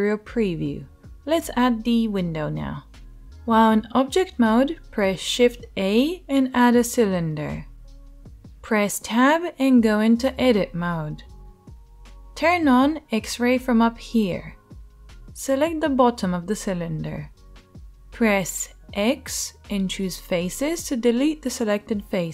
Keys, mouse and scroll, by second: 5.5 shift+a, 10.8 Tab, 14.0-22.3 middle drag, 14.0-22.3 right drag, 18.1 x.